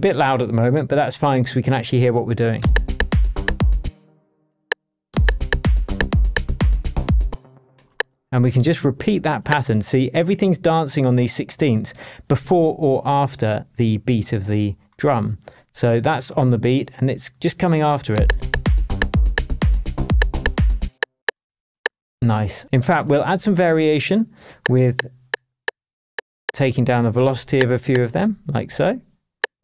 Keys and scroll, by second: 2.6 space, 3.8 space, 5.1 space, 7.3 space, 18.1 space, 20.8 space.